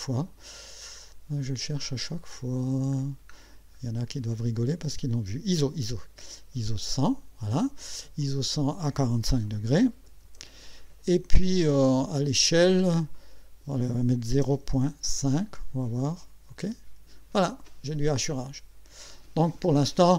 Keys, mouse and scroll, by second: 0.9-1.7 scroll up 2, 2.4 scroll up 2, 3.0-3.8 scroll down 4, 4.1 scroll down 2, 4.9 scroll down 2, 6.7 click, 8.2 click, 9.9 KP_4, 10.2 KP_5, 13.2 click, 14.3 KP_0, 14.6 KP_Decimal, 15.2 KP_5, 16.6 click.